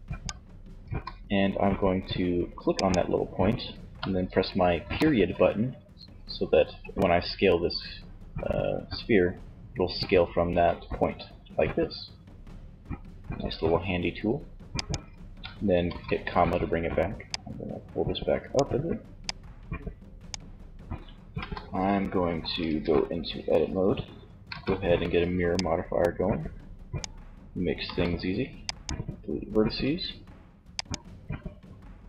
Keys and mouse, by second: 3.9 ., 9.6 s, 15.1 ,, 16.4-18.2 drag, 19.5 click, 20.4 z, 21.9 Tab, 23.6 a, 24.0 b, 26.9 x, 29.0 Tab, 30.4-31.6 drag.